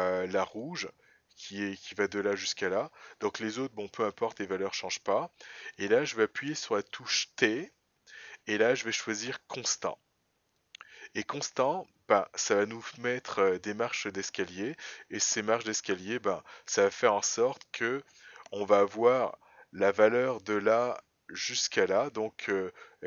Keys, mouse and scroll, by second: 0.9 click, 1.9 click, 15.8 click, 19.3 scroll up 2, 21.5-22.8 scroll up 3.